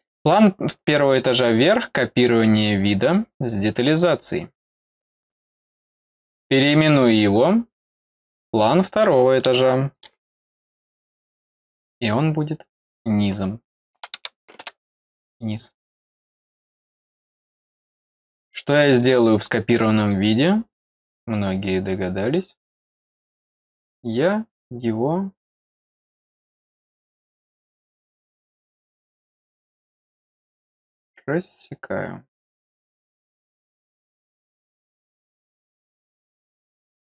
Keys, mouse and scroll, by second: 1.0 right click, 3.0 click, 3.6 click, 5.8 right click, 7.0 click, 7.7 click, 8.3 click, 11.7-13.0 drag, 15.3 click, 18.1 click, 20.0 click, 30.6 click, 33.2 click, 36.0 click.